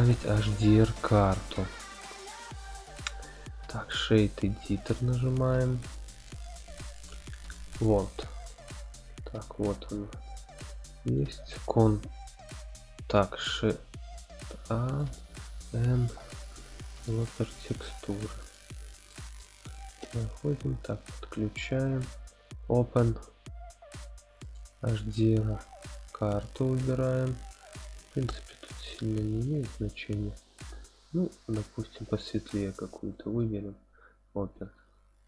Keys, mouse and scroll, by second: 1.2-6.3 drag, 6.9-7.8 drag, 8.5 middle click, 9.1 scroll up 1, 9.9 middle click, 9.9 scroll up 3, 10.4 scroll up 1, 11.0 click, 13.5 shift+a, 19.1 middle click, 20.2-21.4 drag, 21.8 click.